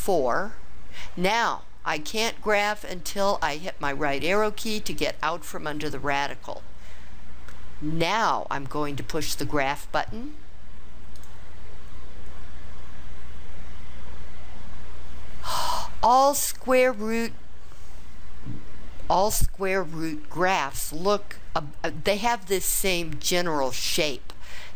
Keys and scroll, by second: 4.2 Right.